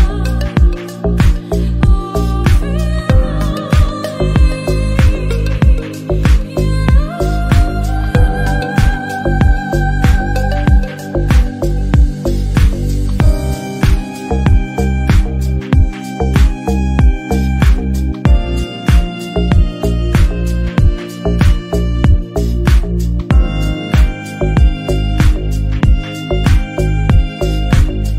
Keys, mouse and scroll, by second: 0.5-3.3 typing, 0.8 shift+click, 1.0 shift+click, 1.1 middle click, 1.5 middle click, 1.7 shift+click, 1.8 shift+middle click, 2.8 Tab, 2.9 click, 3.6 middle click, 3.8 click, 4.4 click, 5.2-5.6 shift+middle drag, 5.6-6.2 scroll down 2, 5.6 middle click, 6.2-6.7 typing, 6.7 click, 6.9 click, 7.2-7.9 shift+middle drag, 7.9-8.3 scroll down 1, 8.3-9.3 shift+middle drag, 9.5 click, 9.9 Tab, 10.1 alt+z, 10.8 s, 14.7 click, 15.3 shift+d, 15.6 p, 15.8 Tab, 15.9 middle click, 16.2 click, 16.5 alt+z, 17.0 click, 17.7 shift+click, 17.9 ctrl+l, 18.3-18.6 drag, 18.6 scroll up 1, 18.8 shift+middle drag, 19.1 KP_1, 19.3-19.9 shift+middle drag, 19.9 Tab, 20.1 Tab, 20.5 Tab, 20.6 alt+z, 20.8 click, 21.5 shift+d, 21.8 p, 22.0 Tab, 22.1-22.4 drag, 22.4 alt+z, 22.9 ctrl+l, 23.4-23.8 shift+middle drag, 23.8 click, 24.0 scroll down 1, 24.1 shift+middle click, 24.8-27.2 typing, 27.0 scroll down 3, 27.9 Tab.